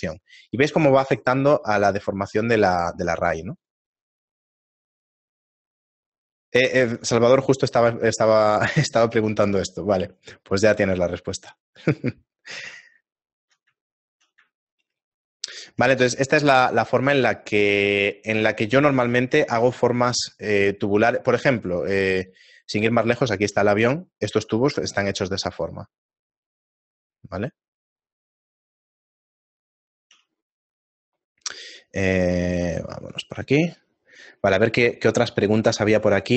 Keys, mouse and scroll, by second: 4.6 middle click, 6.6-7.2 scroll down 9, 8.3 middle click, 9.7 shift+middle click, 10.6 middle click, 10.6-11.3 scroll down 2, 11.3 shift+middle click, 11.8 middle click, 12.8 shift+middle click, 15.6 shift+middle click, 16.6 middle click, 17.2 shift+middle click, 17.7 middle click, 19.0 z.